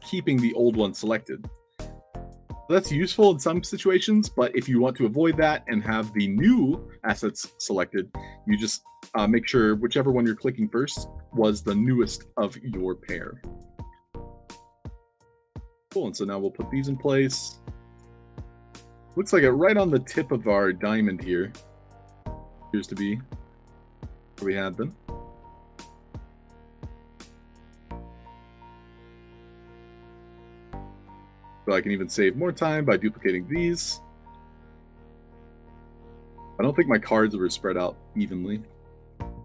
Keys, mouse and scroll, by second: 1.0 ctrl+z, 1.7 click, 2.1 click, 7.2 ctrl+d, 8.1 s, 10.5-11.3 typing, 12.9-14.4 typing, 15.1-15.7 drag, 18.0 a, 19.6 d, 21.6 d, 22.7-23.6 typing, 23.8-25.7 drag, 25.9-26.7 alt+drag, 27.0-30.5 typing, 27.9-28.7 alt+drag, 31.5 shift+click, 32.5 shift+click, 33.1 ctrl+d, 34.2-36.0 drag, 34.3 s, 36.2 f, 37.0 alt+middle click, 37.5-38.5 alt+drag, 38.6 a.